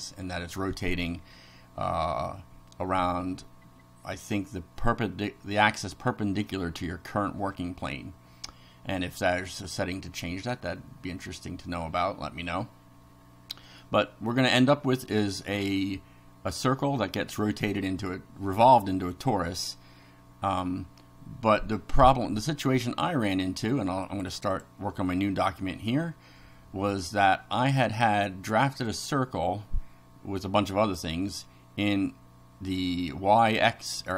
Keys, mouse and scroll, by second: 21.9 click, 22.9 click, 24.0 click, 28.9 click, 30.8 click, 34.0 click.